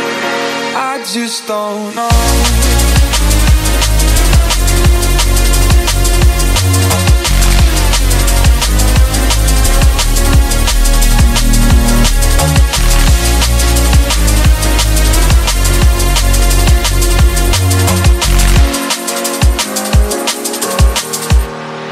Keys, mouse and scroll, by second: 9.5 click, 10.9-11.6 scroll down 1, 11.6-14.1 middle drag, 14.1 space, 14.9-16.2 middle drag, 16.2-16.9 scroll up 1, 16.9-18.2 middle drag, 18.2-19.1 scroll up 1, 19.1 scroll up 1, 19.2 space, 20.8-21.9 scroll down 2.